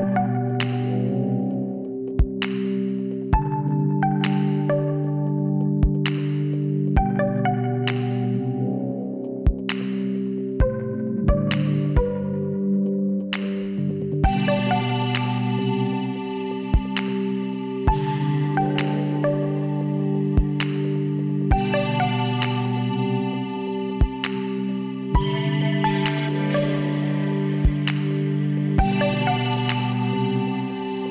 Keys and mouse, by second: 2.7-7.1 drag, 5.8 b, 7.5-9.3 drag, 7.6 b, 8.9 x, 10.9-12.6 drag, 11.1 b, 13.5-15.5 drag, 18.2 e, 24.4 ctrl+z, 25.5 e, 28.6 s.